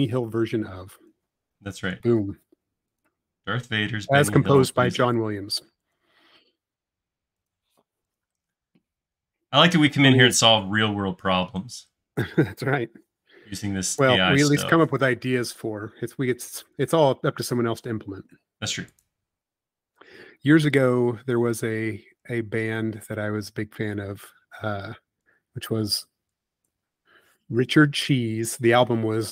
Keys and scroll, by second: 1.6 Up, 6.1 Up, 12.5 Up, 15.8 Up, 21.4 e, 28.1 space.